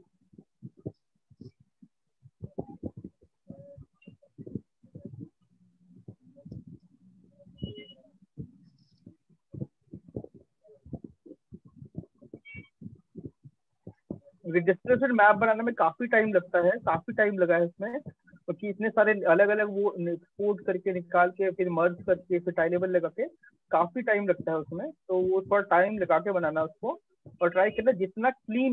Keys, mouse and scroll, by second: 1.2 click, 5.4 click, 11.3 click, 12.5 click, 17.1 click, 18.3 alt+click, 20.2 click, 21.7 click, 22.1 click, 22.9 click.